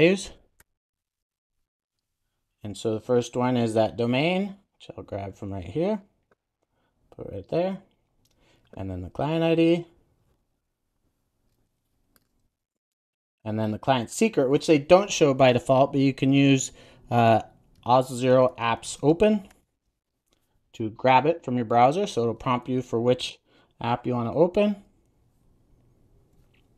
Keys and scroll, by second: 1.5 Return, 7.4 super+v, 12.3 super+v.